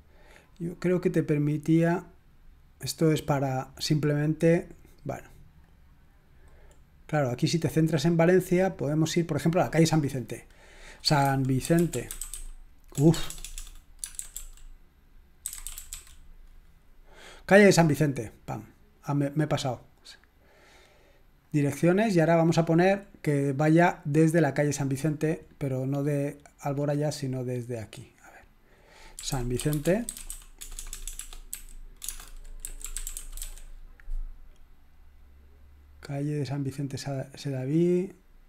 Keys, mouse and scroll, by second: 0.4 click, 1.8 click, 4.3-5.3 scroll up 4, 5.6-6.4 drag, 6.8-7.5 scroll up 1, 7.9-8.4 scroll up 1, 8.8-9.6 drag, 10.5 click, 10.8 click, 10.8-14.1 typing, 15.2-16.4 typing, 17.8 click, 21.4 click, 22.8-23.7 scroll down 2, 24.4 click, 25.1 scroll down 2, 25.7-26.2 scroll down 4, 26.7-27.3 scroll up 2, 28.9-34.0 typing, 28.9 click.